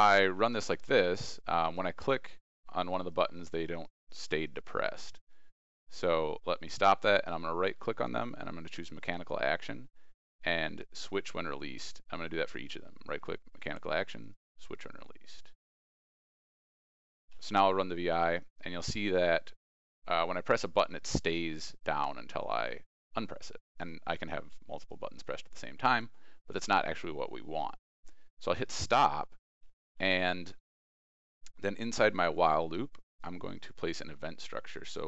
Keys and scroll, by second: 0.1 ctrl+e, 0.7 ctrl+r, 29.6 ctrl+e.